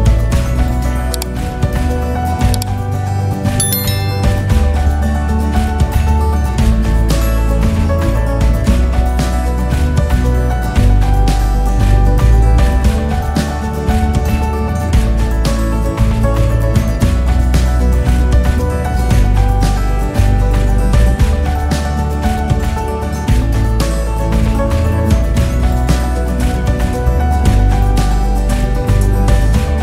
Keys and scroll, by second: 2.7 Return, 3.6 ctrl+s, 19.3 ctrl+s.